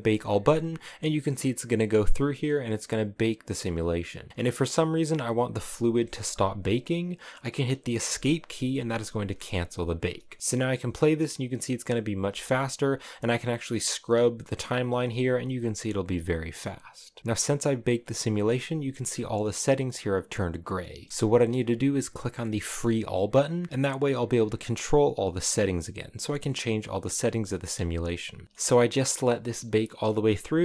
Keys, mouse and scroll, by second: 8.1 click, 8.3 Escape, 9.9 click, 10.4 space, 11.1 click, 11.9 space, 12.1-15.9 drag, 17.2 Escape, 17.5 scroll up 10, 17.8-21.1 middle drag, 21.1 Escape, 22.7-28.4 drag, 28.4-30.6 shift+middle drag.